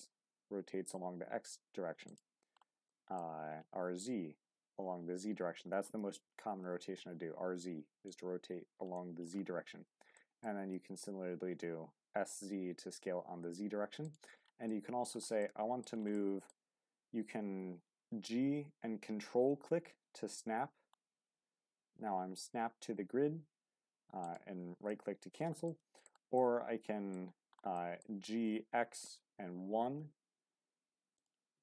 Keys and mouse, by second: 2.1 drag, 2.9 middle drag, 3.7 z, 9.0 middle click, 10.1-10.5 middle drag, 14.7-15.1 middle drag, 15.4-15.8 middle drag, 16.1-16.5 middle drag, 24.2 click, 24.9-25.4 middle drag, 25.6-26.1 middle drag, 26.3 middle click, 27.7 middle click, 28.1 g, 28.3 x, 29.8 KP_1.